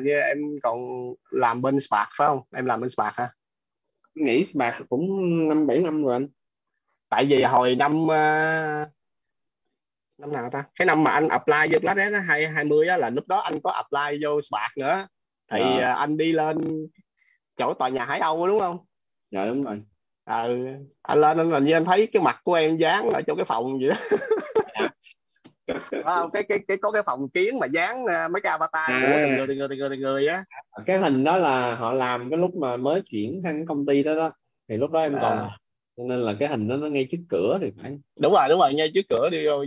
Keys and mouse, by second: 2.7 click.